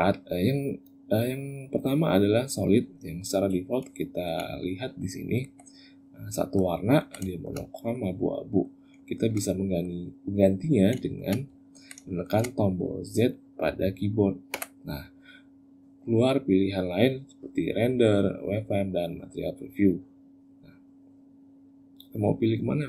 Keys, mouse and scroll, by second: 3.7 shift+middle click, 4.5 ctrl+middle click, 5.6 middle click, 6.6 ctrl+middle click, 7.1 shift+middle click, 7.4 middle click, 8.2 middle click, 8.8 shift+middle click, 9.3 middle click, 10.8 shift+middle click, 11.3 ctrl+middle click, 11.8 shift+middle click, 14.3 z.